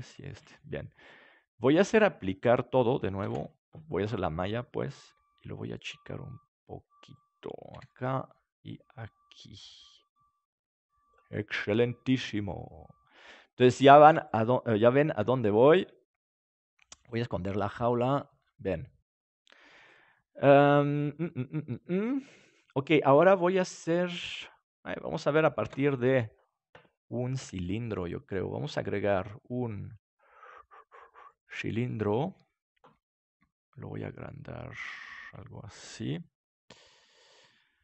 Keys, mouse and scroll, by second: 3.1 alt+c, 5.0 s, 7.1-10.1 drag, 7.7 KP_7, 11.3-13.2 middle drag, 14.0 ctrl+s, 15.1 KP_7, 16.5-18.3 right drag, 18.1 click, 25.6 ctrl+s, 27.5-31.0 drag, 31.2-33.3 drag, 33.3 s, 36.0-37.8 drag.